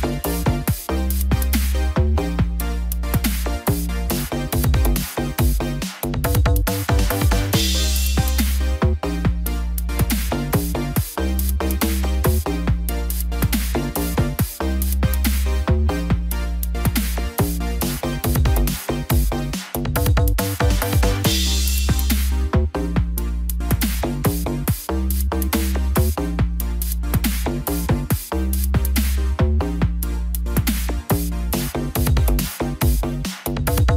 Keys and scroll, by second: 21.0 ctrl+d, 22.7 ctrl+0.